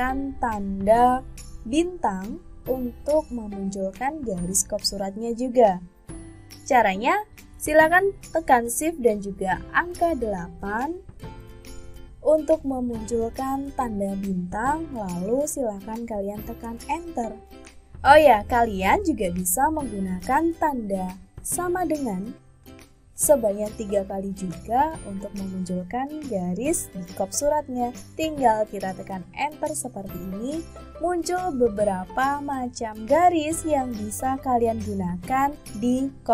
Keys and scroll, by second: 1.9 *, 20.7 =.